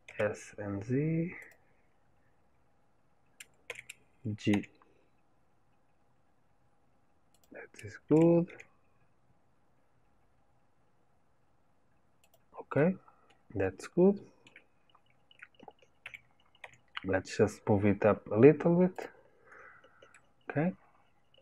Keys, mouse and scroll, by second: 3.6 g, 12.7-16.0 middle drag, 16.0 g, 19.6-20.1 scroll down 1, 20.1-21.4 middle drag.